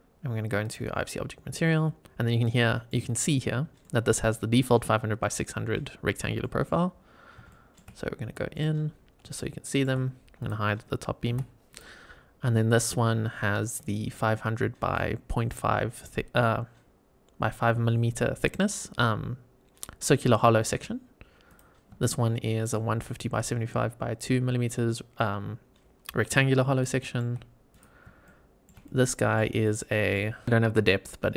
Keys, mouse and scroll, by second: 0.5 click, 2.5 middle click, 3.7 middle click, 6.3 middle click, 7.4 shift+middle drag, 7.8 scroll up 2, 8.4 middle click, 8.5-9.1 scroll up 4, 9.3-9.8 shift+middle drag, 9.9 scroll down 2, 10.3 click, 11.2 h, 11.6 click, 21.4 click, 21.9-22.5 shift+middle drag, 26.7-27.1 shift+middle drag, 27.6 click, 28.1-28.6 shift+middle drag, 28.7-29.3 middle drag, 28.7 scroll down 1, 29.5-30.1 shift+middle drag, 30.2 scroll up 2.